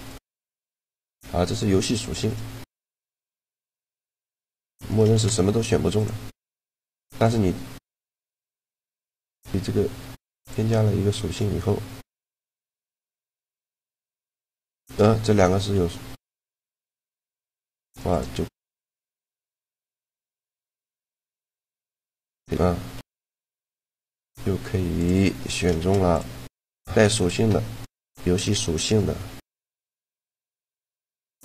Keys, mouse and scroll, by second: 3.0 shift+g, 4.9 shift+g, 6.3 middle click, 7.0-11.6 drag, 9.0-10.8 right drag, 11.1 right click, 13.4 shift+g, 15.2 g, 16.9-18.4 drag, 17.8 right click, 18.4 shift+g, 21.3 shift+g, 22.8 g, 23.9-25.5 drag, 25.1 right click, 25.5 shift+g, 26.6 g.